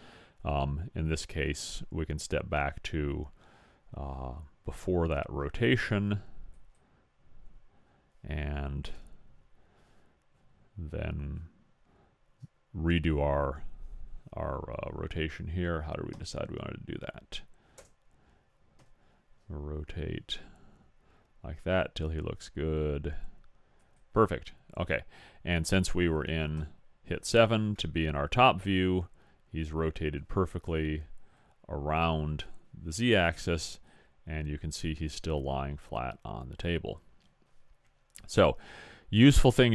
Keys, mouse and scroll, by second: 8.9 KP_7, 12.9-14.8 middle drag, 18.8 r, 26.6 KP_7, 28.0 middle click, 30.7 KP_1, 33.9-37.1 typing, 38.8 middle click.